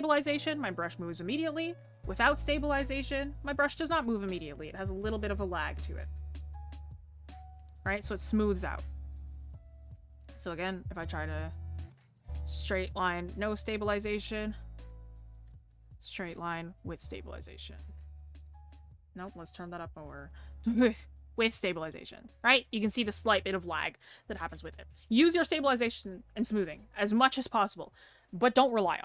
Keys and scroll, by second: 8.1 ctrl+z.